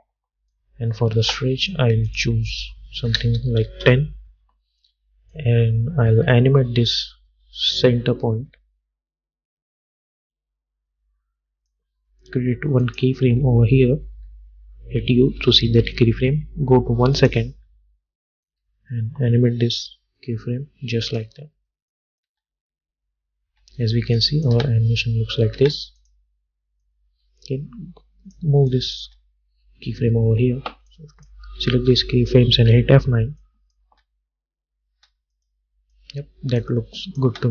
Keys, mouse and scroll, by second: 0.6-2.2 drag, 3.8 Return, 5.4-12.9 drag, 14.2 u, 15.8 =, 16.2 =, 17.3-22.0 drag, 22.4 space, 24.3 click, 24.6 space, 26.1-28.8 drag, 29.2 space, 31.0-32.7 drag, 32.7 F9, 33.5 click, 34.0 space, 35.5 click, 37.4 space.